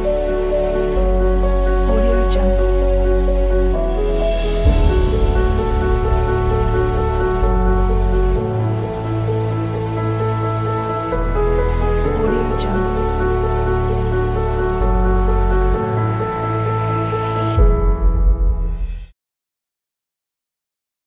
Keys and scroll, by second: 8.4 space, 11.9 space.